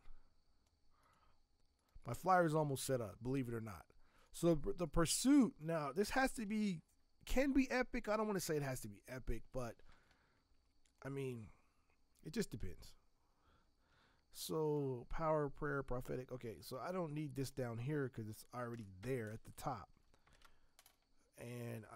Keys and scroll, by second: 6.1 ctrl+t, 13.7 t, 20.3 ctrl+Return.